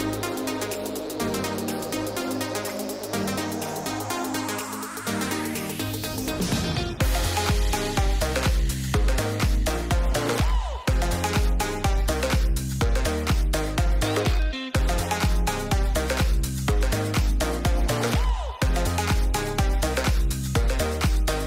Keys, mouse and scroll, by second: 5.1 shift+middle click, 7.8 shift+a, 12.8-13.6 drag, 14.8 g, 18.1 shift+middle drag, 19.3 click, 20.7 r.